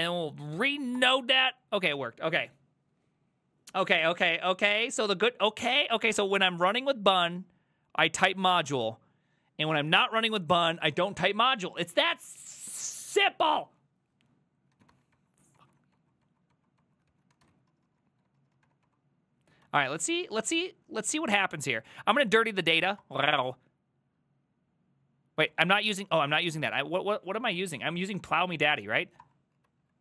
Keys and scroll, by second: 0.0-0.8 typing, 1.0 Return, 14.8 ctrl+a, 14.9 2, 15.2 Up, 15.6 Up, 16.0 Up, 16.3 Up, 16.6 Up, 16.8 Up, 17.1-19.2 typing, 19.7 alt+[, 21.0 alt+{, 23.0 Return, 25.5 ctrl+c, 25.7 ctrl+c, 25.8 ctrl+c, 27.8-28.7 typing, 29.3 Return, 29.7 alt+[.